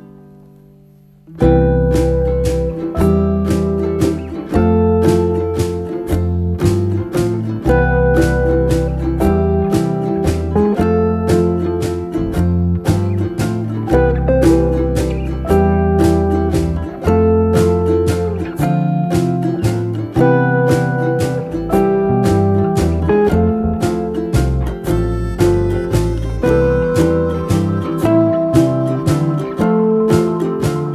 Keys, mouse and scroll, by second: 0.6 Tab, 4.9 ctrl+scroll up 1, 6.6 ctrl+v, 6.6 ctrl+scroll down 1, 7.4-9.4 scroll down 1, 11.1 ctrl+v, 11.3 ctrl+scroll up 1, 12.7 ctrl+scroll down 1, 14.0 shift+scroll up 1.